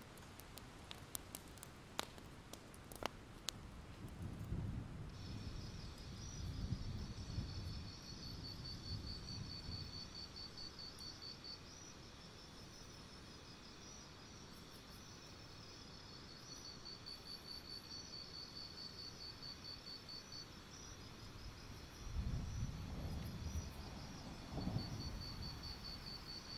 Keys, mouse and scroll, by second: 0.4 alt+scroll down 1, 0.5 alt+scroll up 1, 1.9-2.9 scroll down 1, 3.1 click, 3.3-3.7 alt+scroll up 1, 3.7 click, 4.6 scroll up 1, 7.5-8.0 alt+scroll up 1, 8.0 click, 9.0 ctrl+z, 9.2 click, 10.6 alt+scroll down 1, 10.7-11.6 scroll up 1, 11.6 click, 11.9-12.7 alt+scroll up 2, 12.7-16.1 drag, 16.1-16.6 alt+scroll down 2, 16.3 click, 16.6 click, 16.7 alt+scroll up 1, 17.1 shift+click, 17.6 shift+click, 17.9-18.4 alt+scroll down 2, 18.7 right click, 20.4 click, 21.5 ctrl+z, 22.2 ctrl+z, 23.5 shift+z, 24.5 click, 25.1 shift+click, 26.1 right click.